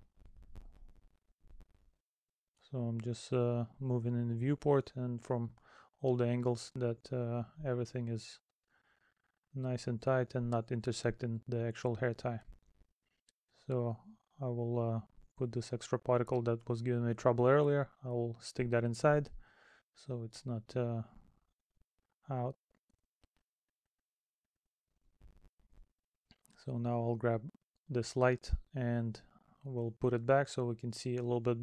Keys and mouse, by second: 0.4 middle click, 1.1 middle click, 2.2 middle click, 2.9 middle click, 3.9 middle click, 5.7 middle click, 6.4 middle click, 8.9 middle click, 9.6 middle click, 11.3 middle click, 12.7 middle click, 14.9 middle click, 16.7 middle click, 18.4 middle click, 19.1 middle click, 20.1 middle click, 20.7 middle click, 21.7 middle click, 23.0 middle click, 24.7 middle click, 26.2 right click, 26.4 middle click, 28.0 middle click, 29.8 middle click, 30.9 middle click.